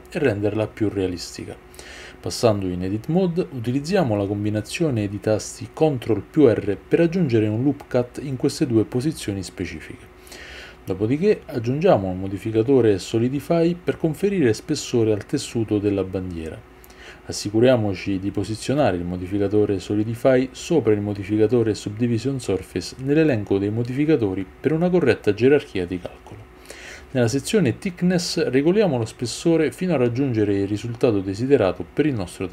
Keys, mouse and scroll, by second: 14.1 click.